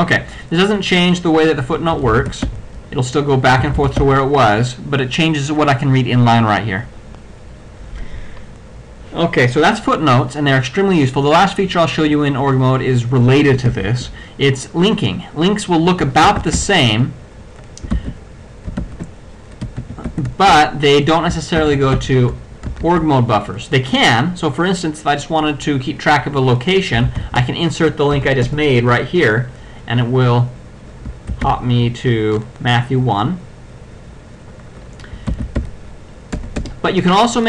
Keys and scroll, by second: 2.1 ctrl+x, 2.6 ctrl+f, 3.6 ctrl+c, 4.0 ctrl+x, 4.0 ctrl+f, 13.7 ctrl+a, 16.3 ctrl+c, 16.7 ctrl+l, 18.0 ctrl+x, 19.8 p, 20.6 Return, 21.6 o, 22.1 y, 27.1-27.8 typing, 28.2 Return, 31.6 o, 35.4 ctrl+x, 35.7 ctrl+o.